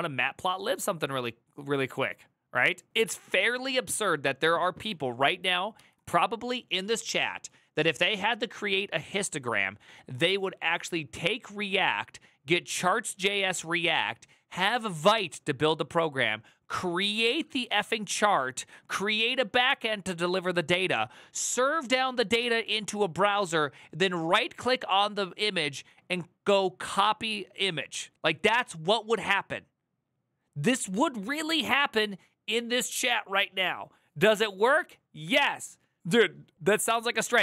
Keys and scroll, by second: 5.5 alt+[.